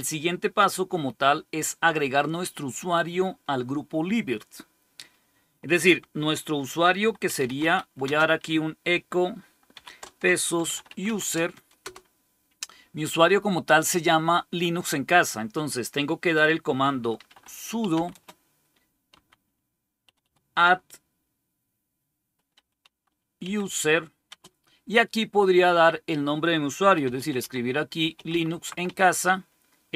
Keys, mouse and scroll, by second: 6.7-8.0 typing, 9.6-11.4 typing, 11.7 Return, 16.8-20.1 typing, 22.4-24.2 typing, 26.4-29.9 typing.